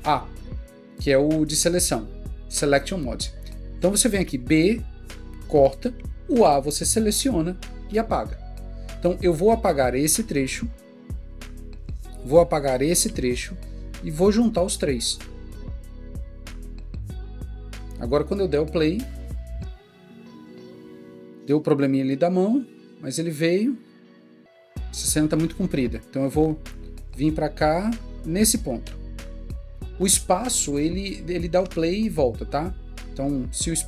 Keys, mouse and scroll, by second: 3.4-4.3 typing, 6.3 typing, 7.9 typing, 11.8 typing, 13.1 ╠, 28.7-29.4 typing.